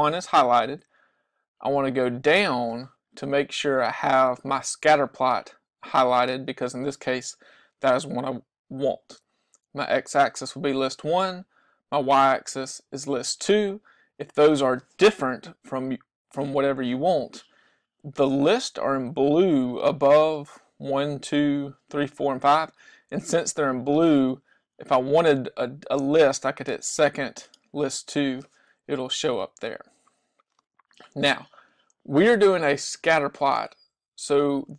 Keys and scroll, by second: 1.8 Down, 15.8 Down, 16.5 Down, 27.6 2, 29.4 Down, 30.7 Down.